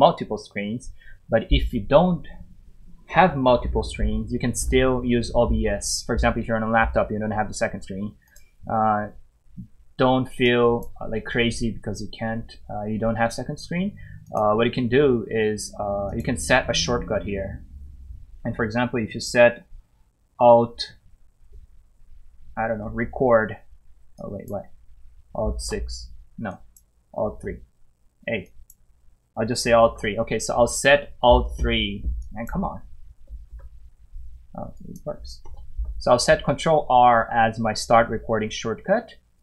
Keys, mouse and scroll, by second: 8.3 click, 14.2 click, 20.8 click, 22.8 alt+r, 24.1 click, 25.6 6, 26.5 click, 27.3 alt+r, 28.4 click, 29.8 alt+6, 32.2 click, 33.5 ctrl+6, 34.7 click, 35.4 ctrl+r, 39.3 click.